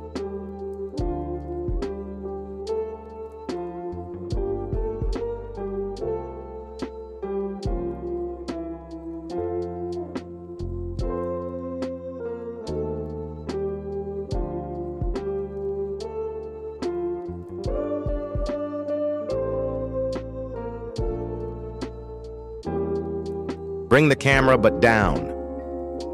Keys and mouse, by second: 0.4 z, 0.5 z, 1.2-2.3 middle drag, 2.7 shift+middle click, 3.4 g, 4.8 s, 6.0 s, 6.4 middle drag, 7.1 shift+middle click, 8.0 g, 11.7 KP_1, 14.4 shift+middle drag, 15.0 g, 20.9 shift+middle click, 21.5 g, 23.6 shift+click, 25.2 g.